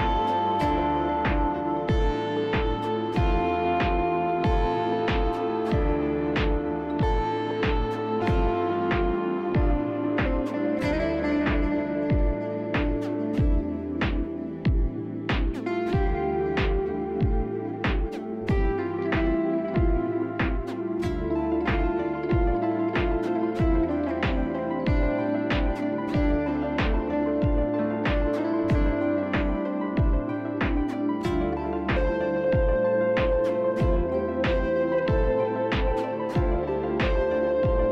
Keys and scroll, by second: 1.4-4.0 typing, 7.3 shift+s, 8.3 s, 9.3 shift+s, 9.5 ctrl+z, 9.9 shift+s, 10.0 shift+s, 10.7 shift+s, 13.3-14.2 typing, 17.8-20.2 typing, 22.3-24.9 typing, 26.8-28.0 typing, 27.1 ctrl+z, 28.3 ctrl+z, 32.6-35.7 typing, 33.2 ctrl+z, 36.9 shift+s.